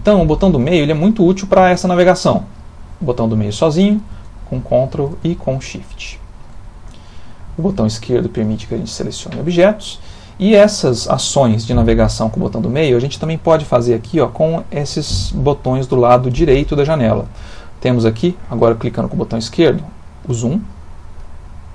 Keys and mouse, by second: 2.7 middle click, 4.2 ctrl+middle click, 5.4 shift+middle click, 6.7 middle click, 7.7 click, 8.5 click, 9.4 click, 19.6 click, 21.6 click.